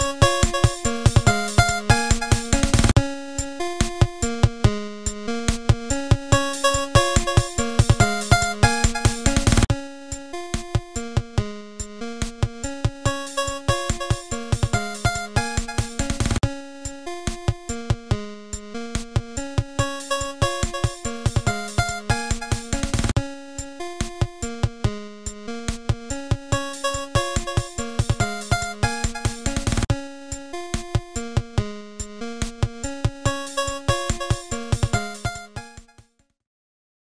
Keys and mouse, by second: 0.8 click, 3.6 click, 4.4 click, 4.8 click, 5.6 click, 6.3 click, 7.1 click, 7.8 click, 8.1 click, 8.6 click, 9.4 click, 10.2 click, 11.0 x, 11.2 click, 12.5 click, 12.7 Tab, 13.0 click, 14.0 click, 15.9-17.2 drag, 17.8 e, 20.9 Tab, 21.7 Tab, 23.6 l, 25.8 click, 26.0 click, 28.3 click, 30.9 click, 31.4 Tab, 31.6 click, 32.3 shift+a, 35.6 super+z.